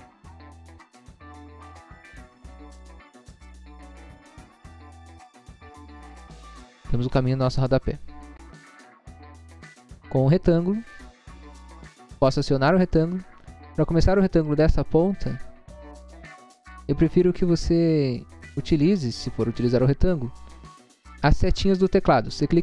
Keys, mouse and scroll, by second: 0.4 scroll up 1, 2.1 click, 2.8 click, 3.1 click, 3.4 click, 3.6 click, 3.9 click, 4.0 click, 4.5 click, 5.1 double click, 5.9 click, 6.3 click, 6.5 click, 7.0 click, 7.3 click, 7.9 scroll down 1, 8.5 scroll down 1, 10.8 click, 11.4 middle click, 11.8 middle click, 11.9 scroll up 1, 12.5-12.8 scroll up 1, 13.4 middle click, 14.2 middle click, 14.2 scroll up 1.